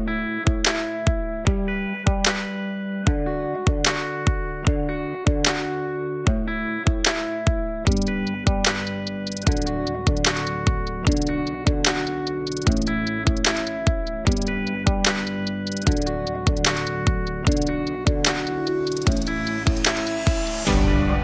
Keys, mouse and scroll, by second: 1.6 g, 11.4 click, 12.2 KP_0, 18.8-19.4 scroll up 6, 19.4 alt+click, 20.0-20.7 scroll up 2, 20.7 click.